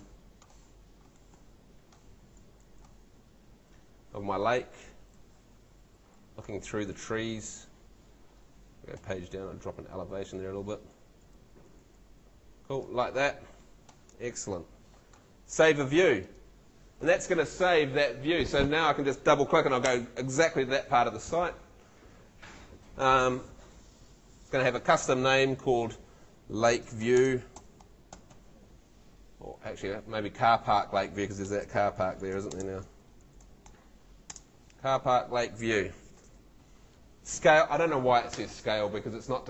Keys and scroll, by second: 1.0 shift+a, 1.3 shift+z, 2.8-6.5 typing, 9.0 Page_Down, 10.7 s, 11.3 a, 11.7 w, 26.3-28.8 typing, 29.7 Left, 31.3-34.3 typing.